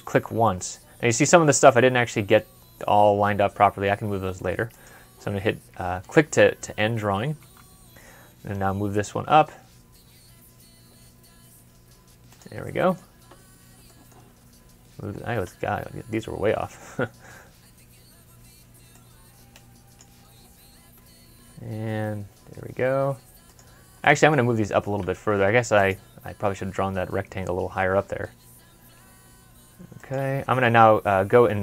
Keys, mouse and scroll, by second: 7.2 typing, 7.4 Escape, 10.2 scroll down 1, 10.7 scroll up 1, 12.5 middle click, 13.0 scroll up 1, 13.3 scroll down 1, 20.9 typing, 23.9 middle click, 24.3 scroll down 1, 24.7 typing, 26.4 typing, 27.7 typing, 30.7 scroll down 1, 31.2 scroll up 1.